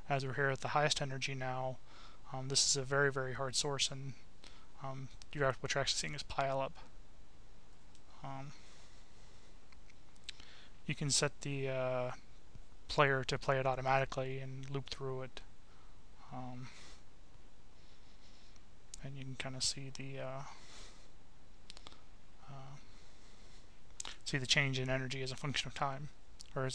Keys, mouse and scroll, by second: 1.1 click, 2.2 click, 4.8 click, 6.4 click, 7.7 click, 8.5 click, 11.0 click, 12.0 click, 14.2 click, 20.0 click, 22.8 click, 23.8 Delete, 25.0-26.7 drag.